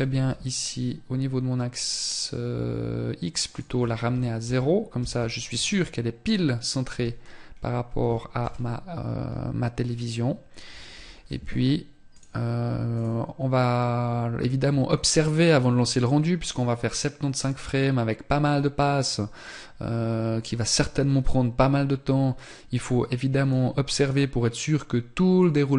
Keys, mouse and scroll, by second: 2.7 click, 6.1 n, 7.6 KP_0, 10.1 alt+h, 11.3 click, 22.7 click.